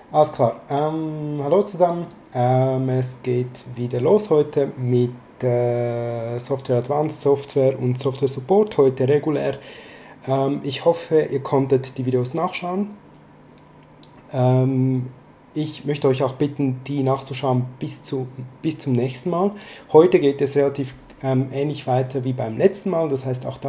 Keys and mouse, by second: 2.0 click.